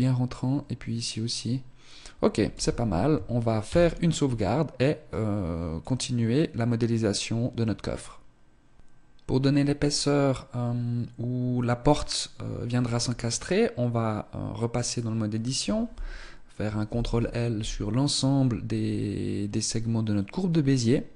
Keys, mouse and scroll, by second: 2.4 z, 3.6 ctrl+s, 12.8 Tab, 14.8 right click, 16.8 ctrl+l.